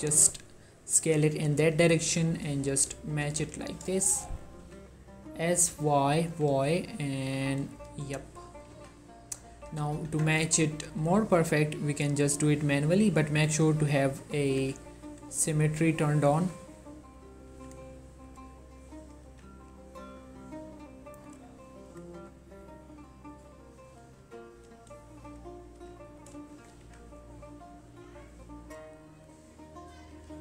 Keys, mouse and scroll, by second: 0.8 click, 1.1 g, 2.1 click, 2.7-3.1 scroll up 1, 3.2 g, 3.5 y, 4.4 click, 4.7 s, 5.8 y, 6.4 y, 8.8 z, 9.8 z, 10.2 Tab, 11.0 click, 11.2 g, 11.6 scroll up 1, 11.9 right click, 13.6 click, 14.8 g, 15.3-16.5 scroll up 1, 16.5 click, 17.6 g, 18.1 scroll down 1, 18.4 click, 19.4 g, 20.0-21.4 scroll down 1, 21.4 click, 22.3 g, 22.5-23.1 scroll up 1, 23.4 click, 24.3 g, 24.8-25.9 drag, 25.9 g, 26.1 scroll up 2, 26.3 right click, 26.7 shift+click, 26.9 g, 27.4-28.1 scroll up 2, 28.1-29.4 scroll up 1, 29.4 click, 30.1 g.